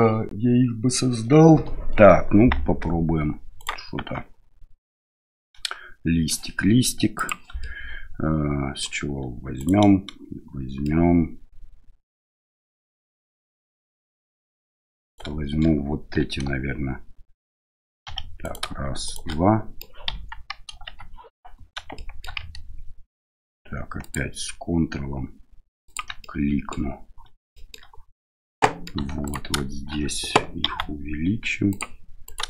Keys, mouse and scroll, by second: 3.6 right click, 4.0 Tab, 4.9-6.3 middle drag, 7.1 click, 7.6-8.8 middle drag, 9.6 right click, 10.8-14.6 middle drag, 15.0 right click, 18.0 2, 18.4 right click, 19.0 shift+right click, 19.3 middle click, 20.1 KP_1, 20.7 KP_3, 21.9 shift+middle click, 24.0 ctrl+click, 25.8 ctrl+click, 26.2 middle click, 27.5 shift+middle click, 28.6 middle click, 29.2 alt+right click, 30.6 s, 32.2 right click.